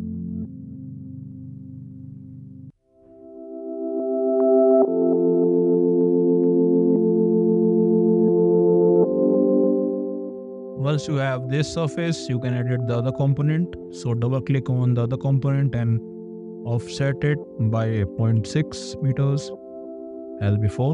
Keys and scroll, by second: 8.2 e, 18.3 6, 18.9 Return.